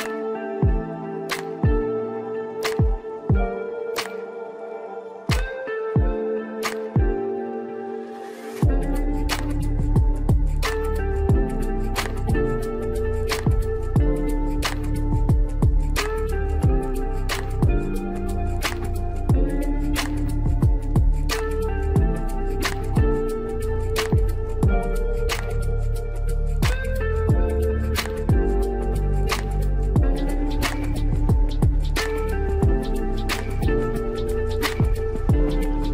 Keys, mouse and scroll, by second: 2.3-4.4 scroll down 1, 4.4-7.5 drag, 8.1-8.6 scroll down 2, 8.6-10.6 middle drag, 10.6 KP_7, 11.5-11.9 scroll down 2, 11.9 click, 12.6-13.5 shift+middle drag, 13.5-14.8 scroll up 2, 14.8-15.3 scroll up 1, 15.3 scroll up 1, 15.5-17.0 scroll down 1, 17.0-18.6 scroll down 1, 19.5-22.5 drag, 23.3-24.4 scroll down 2, 24.4-27.5 drag, 30.2-33.2 drag, 34.1-34.9 scroll down 2, 34.9-35.9 middle drag.